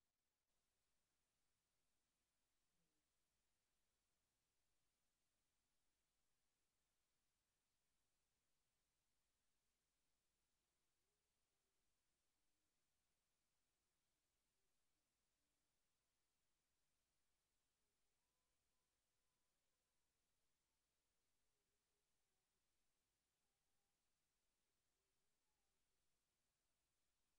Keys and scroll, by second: 2.6 ctrl+v.